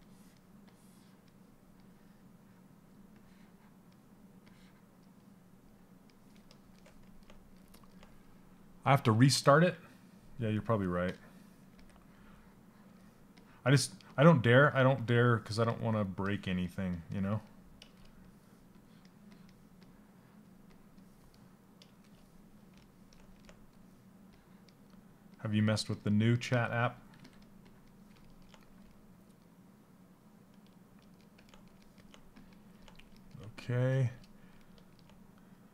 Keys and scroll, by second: 26.0 s, 26.8 s.